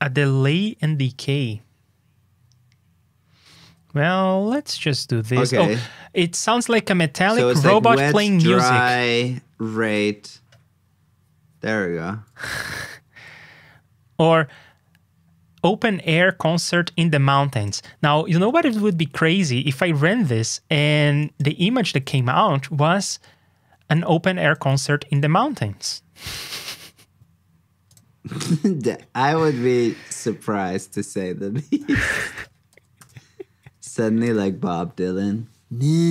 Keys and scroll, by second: 12.5 super+c, 18.2 super+c, 18.4 super+Tab, 21.9 super+v, 22.3 super+Tab, 25.3 super+Tab, 32.6 super+c, 32.9 super+j.